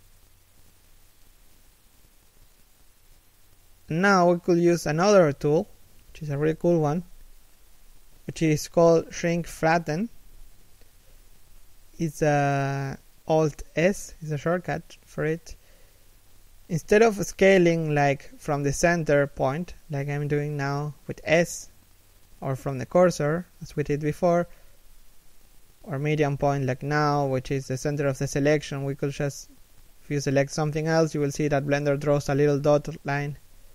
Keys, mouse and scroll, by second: 4.4 g, 15.7 s, 17.4 middle click, 18.0 s, 23.0 KP_3, 23.5 KP_1, 24.3 s, 27.5 s, 28.9 scroll down 1, 29.6 shift+right click, 30.1 s.